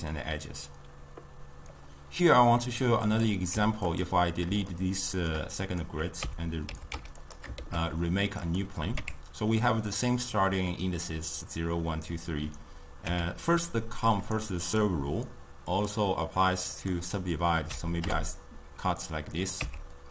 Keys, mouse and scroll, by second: 3.1 click, 3.6 x, 4.6 scroll up 2, 4.7-5.6 shift+middle drag, 5.6 click, 6.3 Tab, 6.7 a, 7.0 x, 7.6 shift+a, 9.0 Tab, 13.1 Tab, 14.2-15.8 right drag, 15.8-19.6 drag, 19.6 Tab.